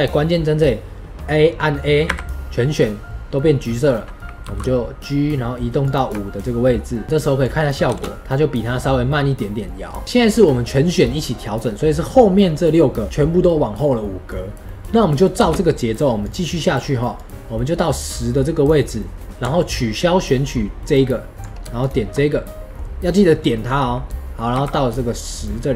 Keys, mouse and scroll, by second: 2.0 a, 4.4 g, 7.3-7.8 drag, 7.8 space, 8.2-15.3 middle drag, 15.3 space, 16.1-18.9 drag, 18.9-19.5 right drag, 18.9 middle click, 19.5 ctrl+click, 21.7-22.4 shift+drag, 22.4-24.5 middle drag, 24.5 g.